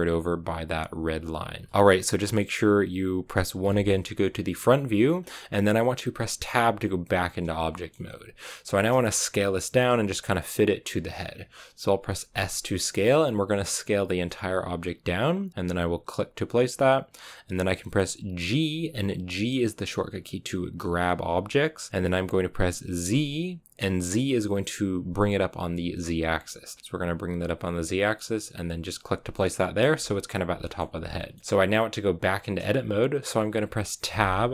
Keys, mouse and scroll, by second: 1.7-5.1 shift+middle drag, 5.1-6.4 scroll up 1, 6.4 Tab, 7.6 shift+middle click, 7.9-12.1 scroll up 1, 12.1 s, 18.5 g, 29.2 shift+middle click, 29.8-30.5 scroll up 4, 30.5 shift+middle click, 31.4-34.0 scroll up 2, 34.0 Tab.